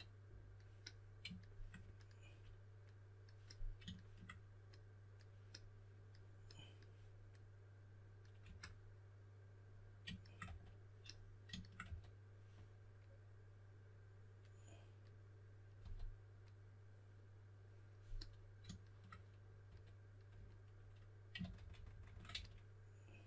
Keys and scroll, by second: 8.4 q, 10.4 w, 11.8 w, 15.8 typing, 19.6 w, 21.2-23.2 typing.